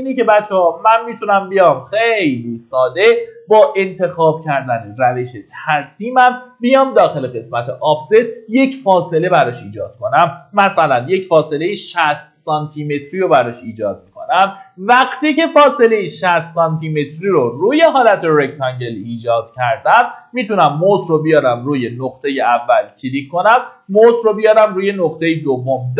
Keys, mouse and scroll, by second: 1.3 Escape, 8.8-10.1 drag, 10.8 KP_Decimal, 10.9 KP_6, 19.2-19.7 scroll up 1, 22.2 click.